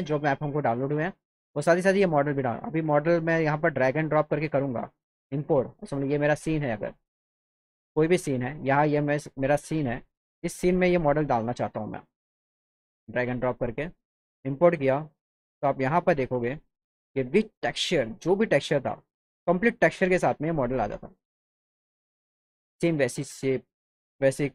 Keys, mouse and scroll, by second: 0.9 click, 3.4 click, 4.3 click, 7.1 click, 7.5 click, 7.9 click, 9.1 click, 10.3 click, 11.6 click, 12.5 click, 14.2 click, 17.8 click, 20.1 click, 20.9 middle click, 20.9 scroll, 21.9 click.